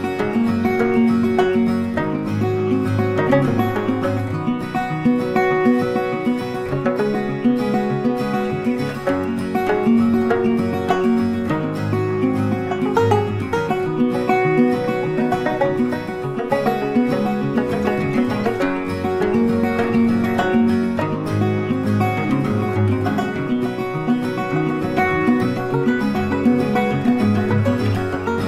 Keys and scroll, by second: 5.2 Delete, 6.4 ctrl+d, 13.2 Delete, 14.7 ctrl+d, 19.2 ctrl+t.